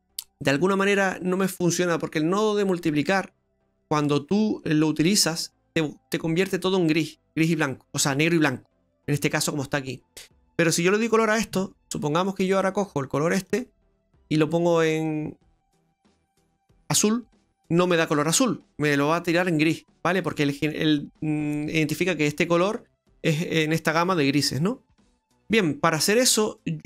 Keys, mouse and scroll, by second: 11.6-12.2 scroll up 5, 12.3 middle click, 13.5 click, 19.8-20.3 scroll down 2, 20.3 middle click, 20.8-21.4 scroll down 3, 24.6 scroll down 2, 24.9 middle click.